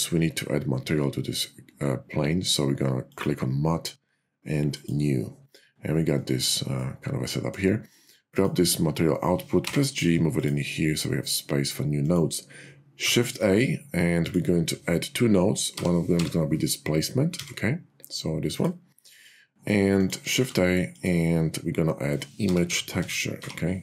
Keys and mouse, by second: 4.6 click, 6.9 middle click, 9.5 g, 11.9 click, 13.0 shift+a, 19.9 click, 20.3 shift+a.